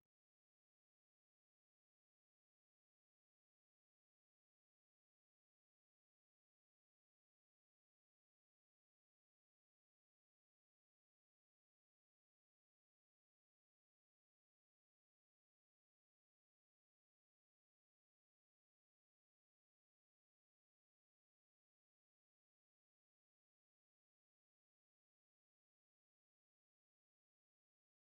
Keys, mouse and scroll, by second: 5.4 alt+click, 6.3 click, 8.3 click, 12.8 alt+click, 14.6 click, 18.7 alt+click, 19.6 click, 20.8 alt+click, 22.8 click, 24.4 alt+middle click, 24.7 alt+middle click, 27.9 click.